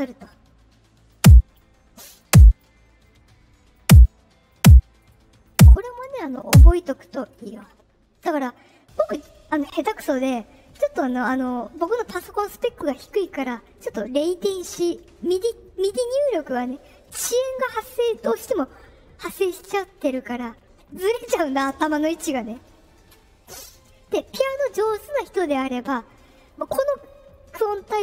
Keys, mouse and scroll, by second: 1.0 click, 2.1 click, 2.8 middle click, 3.7 click, 4.4 click, 4.9 right click, 5.4 click, 6.3 click.